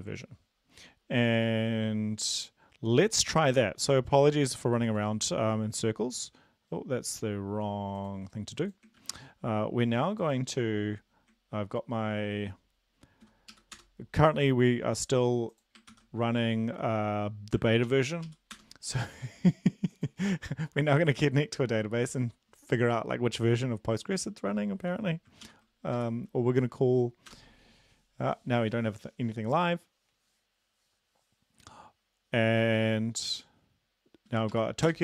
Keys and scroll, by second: 9.0 ctrl+`, 13.8 shift+Return, 15.9 ctrl+c, 17.8 ctrl+l, 18.2 Up, 18.6 Return, 25.4 ctrl+l, 26.0 Up, 27.3 Return, 34.5 Right, 34.5 Up, 34.9 Return.